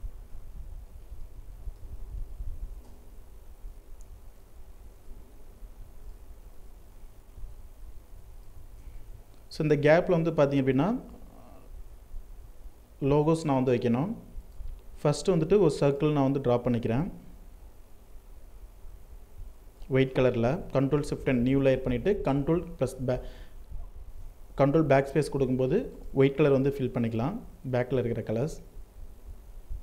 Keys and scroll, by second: 1.9 ctrl+Return, 5.8 ctrl+t, 19.7 ctrl+shift+n, 21.1 BackSpace, 23.1 ctrl+d.